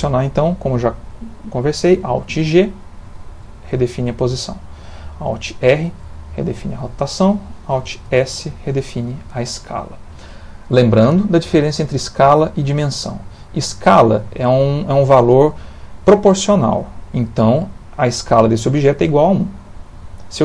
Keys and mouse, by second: 3.1 alt+g, 5.8 alt+r, 8.1 alt+s.